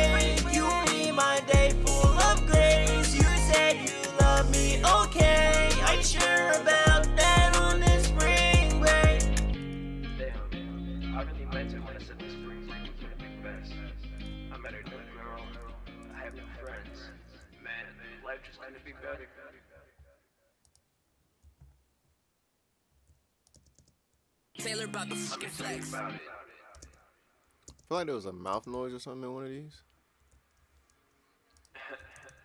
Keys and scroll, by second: 5.4-6.4 typing, 16.5-17.6 typing, 25.5 shift+s, 26.6-28.1 typing, 32.1 ctrl+Page_Up, 32.3 ctrl+Page_Up.